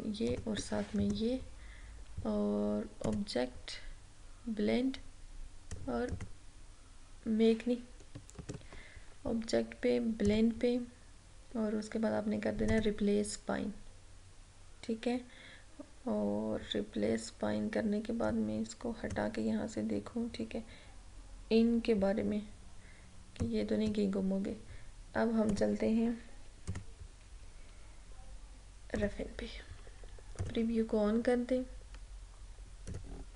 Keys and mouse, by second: 0.4 shift+click, 1.1 right click, 3.1 click, 3.2 click, 6.2 click, 8.5 ctrl+z, 10.4 click, 12.8 click, 18.4-21.5 drag, 23.5-25.6 drag, 29.1 click, 33.0-33.3 drag.